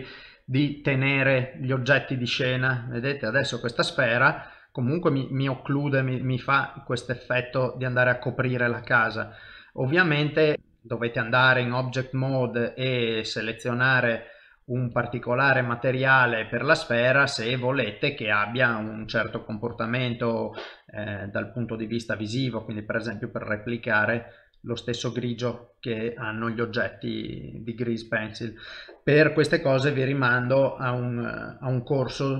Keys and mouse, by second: 0.9 click, 1.6 middle click, 3.1 ctrl+middle click, 4.1 shift+middle click, 4.4 middle click, 6.3 shift+middle click, 10.0 middle click, 10.5 ctrl+Tab, 10.5 click, 14.1 click, 18.6 right click, 21.2 click, 24.8 middle click, 30.0 middle click, 31.6 ctrl+middle click, 32.1 middle click.